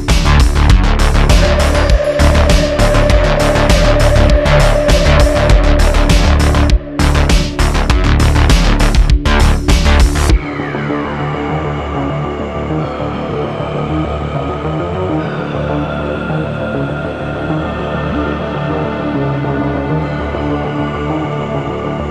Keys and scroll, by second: 0.3 Tab, 0.8 q, 2.9 Tab, 5.5 Tab, 7.7 d, 7.9 3, 8.0 1, 8.0 1, 13.5 shift+2, 13.8 Tab, 13.9 d, 14.0 4, 14.1 1, 15.3 s, 15.9 s, 16.5 y, 20.0 shift+d, 20.3 x, 20.9 shift+d, 21.1 x.